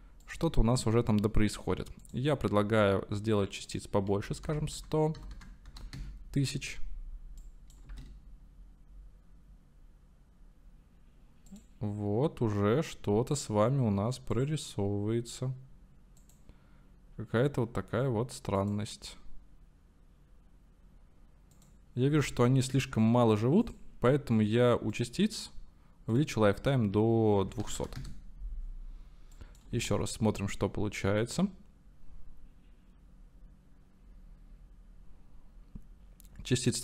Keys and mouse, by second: 0.3 space, 2.0 click, 3.8-7.0 drag, 4.8 KP_0, 5.4 KP_0, 7.5 click, 7.9 space, 11.7 click, 14.7 click, 16.6 click, 18.8 click, 22.1 space, 23.8 click, 26.2-28.5 drag, 27.8 KP_0, 29.8 space.